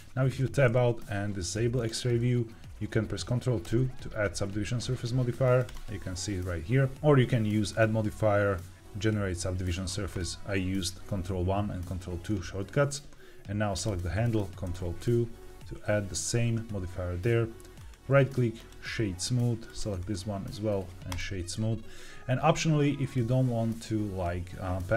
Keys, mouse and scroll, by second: 0.2 Tab, 1.6 click, 3.6 ctrl+2, 5.5-6.0 drag, 7.6-10.6 drag, 13.6 click, 14.6 ctrl+2, 17.7-18.7 right drag, 19.6 click, 19.9-21.1 right drag.